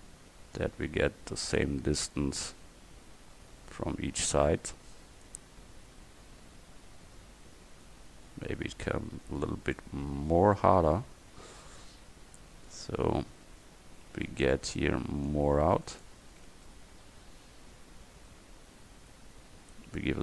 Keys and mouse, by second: 5.0-6.2 middle drag, 10.0 click, 10.6 middle click, 11.8 middle click, 12.6 middle click, 12.9 middle click, 13.1-15.3 middle drag, 15.3-17.5 drag, 16.5 Tab.